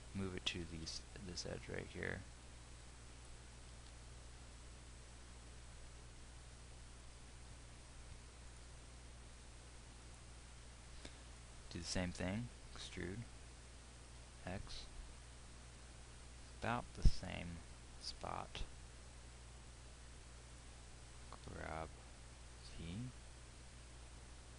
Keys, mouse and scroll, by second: 0.2-9.4 drag, 1.1 g, 12.9-16.4 drag, 12.9 e, 18.5-22.0 drag, 22.0 g.